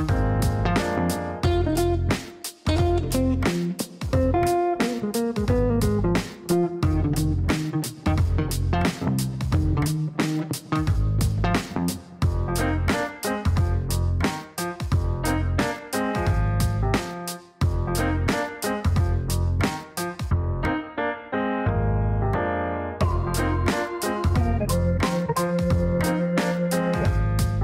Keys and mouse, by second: 0.8 click, 1.6 click, 6.8 click, 9.3 click, 10.4 click, 11.2 click, 12.2 click, 12.8 click, 13.3 right click, 16.7 click, 17.6 click, 18.3 click, 18.9 click, 21.6 click, 22.6-23.5 typing.